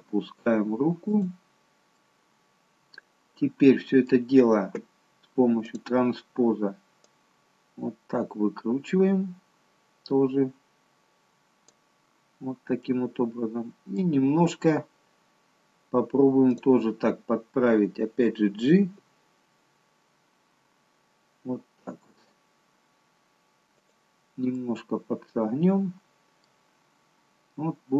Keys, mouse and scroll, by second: 2.2 middle click, 5.6 click, 7.0 click, 12.8 middle click, 14.2-15.8 scroll up 1, 15.8-16.5 scroll up 2, 16.5 click, 18.8 g, 24.5 middle click, 27.3 scroll down 2.